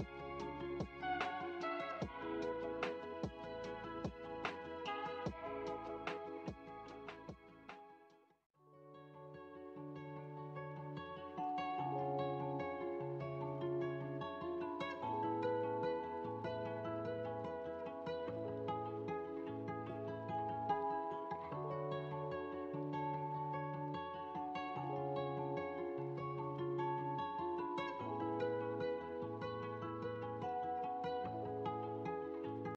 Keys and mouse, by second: 4.4-7.4 drag, 8.1-16.9 drag, 17.7-20.9 drag, 21.7-26.1 middle drag.